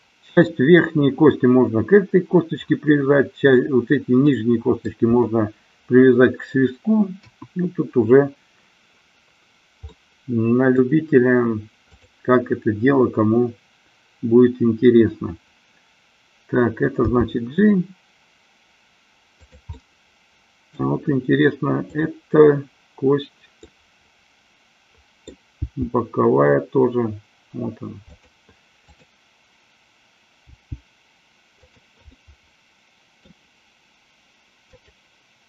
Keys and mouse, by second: 4.3 middle click, 7.3 KP_1, 9.9-10.9 middle drag, 11.9-13.1 drag, 16.9 g, 19.6 click, 19.8-20.9 middle drag, 23.8-25.5 middle drag, 25.6 g, 28.9 click, 30.5 g, 31.8 click, 32.3-33.5 middle drag, 34.0 click, 34.9-35.4 drag.